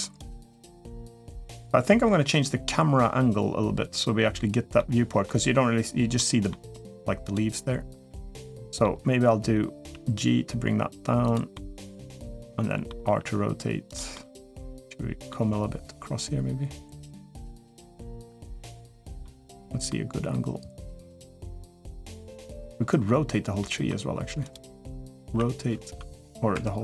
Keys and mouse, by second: 4.5 middle click, 5.9-6.3 middle drag, 7.1 click, 7.8-8.6 middle drag, 9.7 g, 11.3-12.7 middle drag, 12.8 r, 13.9-15.1 middle drag, 15.2 g, 17.8-19.0 middle drag, 19.6-22.4 middle drag, 23.4 middle click, 24.3 click, 25.0 r.